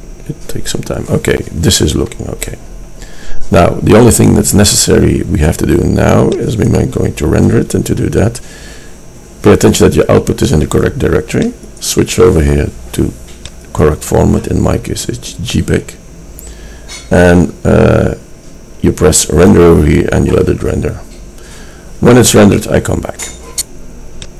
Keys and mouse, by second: 6.7-8.6 drag, 11.7-14.2 drag.